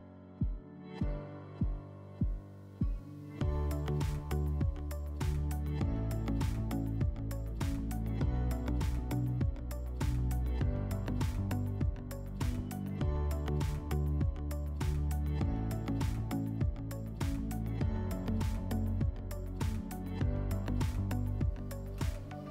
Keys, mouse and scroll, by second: 0.4 click, 1.7 click, 3.0-3.6 scroll, 5.7 click, 6.6 click, 7.8 click, 8.3 click, 9.7 click, 10.1 click, 11.6 click, 12.2 click, 13.6 click, 14.1 click, 15.7 click, 19.6 click, 20.6 click, 22.2 click.